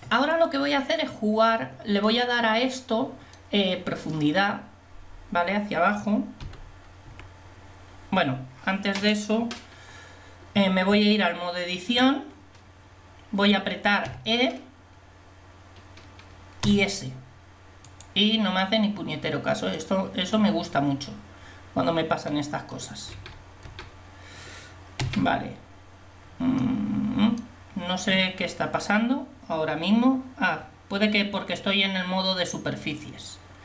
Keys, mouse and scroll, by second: 6.5 KP_1, 7.1 KP_7, 11.0 Tab, 14.1 e, 16.7 s, 17.9-19.4 drag, 23.1 a, 23.7 a, 25.1 e.